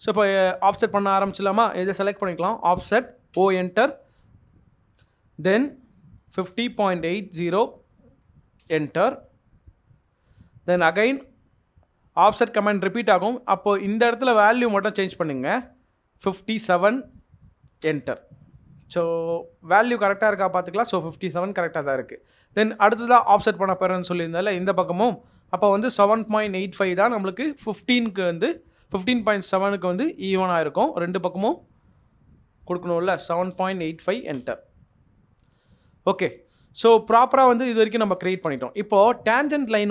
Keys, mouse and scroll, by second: 1.0 double click, 2.1 typing, 3.3 Return, 5.9-7.4 typing, 8.6 Return, 8.6 BackSpace, 16.2 typing, 25.6-27.3 typing, 32.9-34.5 typing, 35.2 Escape, 35.7 middle click, 37.1 scroll up 1, 39.7 middle click.